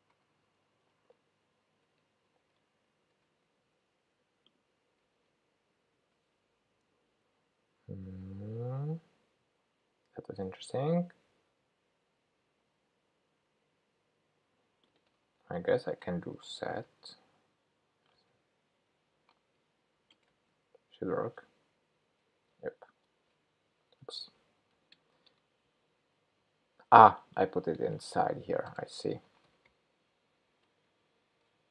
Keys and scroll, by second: 2.8 shift+super+p, 2.9 shift+super+p, 23.1 shift+super+Up, 24.2 super+z, 24.9 super+BackSpace, 30.9 shift+super+p.